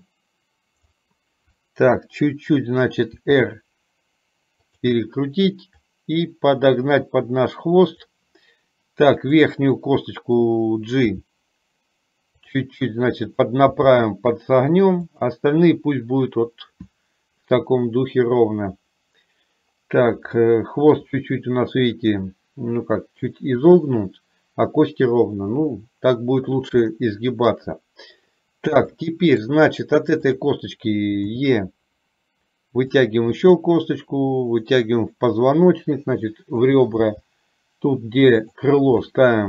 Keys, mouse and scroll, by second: 3.2 r, 6.2-8.2 drag, 9.4 click, 11.2 g, 13.9 g, 20.5 shift+middle click, 27.0 shift+middle click, 29.1 shift+middle click, 31.5 e, 33.6 e.